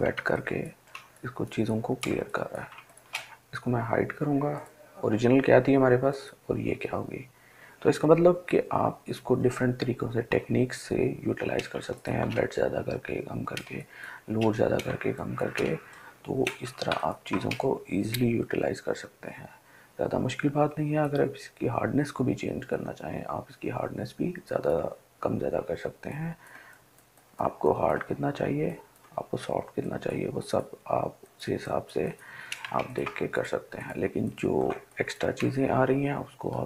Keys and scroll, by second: 12.0-15.7 ctrl+space.